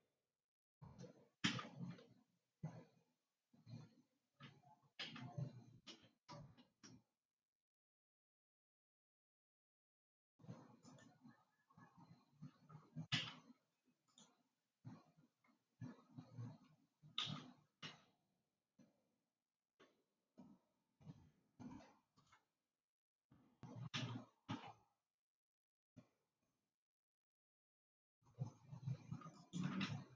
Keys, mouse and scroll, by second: 1.9 Tab, 5.6 Tab, 6.2 s, 13.6 Tab, 14.5 click, 17.8 r, 24.8 r.